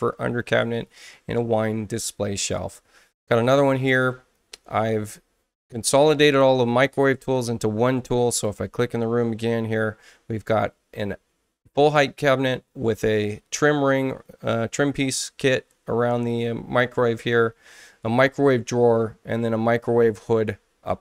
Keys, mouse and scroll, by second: 3.8 click, 8.3 click.